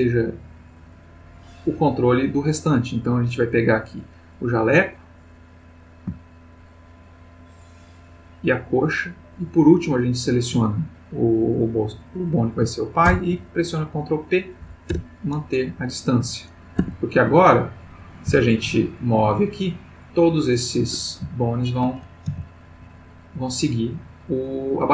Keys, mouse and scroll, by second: 3.7 click, 5.2 click, 6.4 shift+click, 7.9 shift+click, 9.9 shift+click, 13.0 ctrl+p, 14.6 Down, 14.9 Return, 16.8 Tab, 17.5 click, 18.3 g, 20.8 Escape, 21.3 ctrl+middle click, 22.3 g.